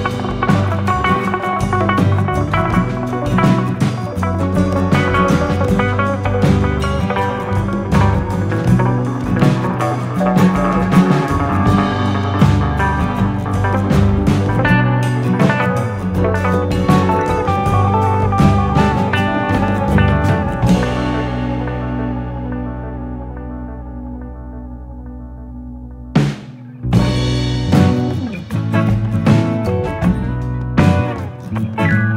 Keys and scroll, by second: 10.6 u, 17.4 F9.